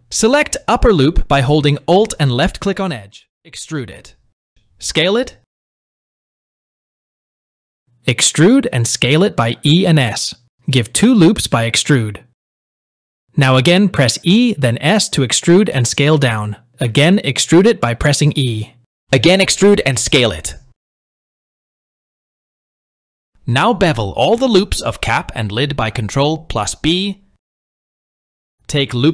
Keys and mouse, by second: 2.7 alt+click, 4.2 e, 9.2 e, 22.2 click, 22.8 shift+middle click, 23.3 ctrl+b, 24.4 ctrl+b, 25.4 ctrl+b, 26.6 ctrl+b, 27.3 KP_1, 27.5 shift+middle click, 28.0 ctrl+b.